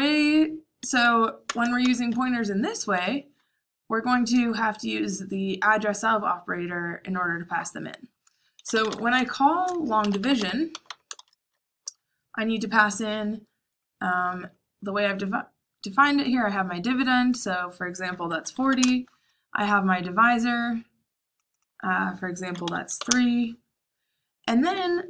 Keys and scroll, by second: 0.0-1.7 typing, 8.2-11.1 typing, 18.0-19.1 typing, 22.6-23.0 typing.